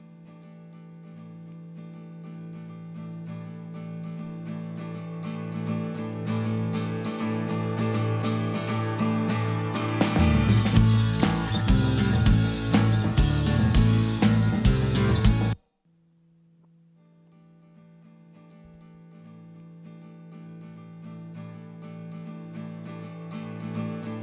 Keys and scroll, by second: 15.2 space.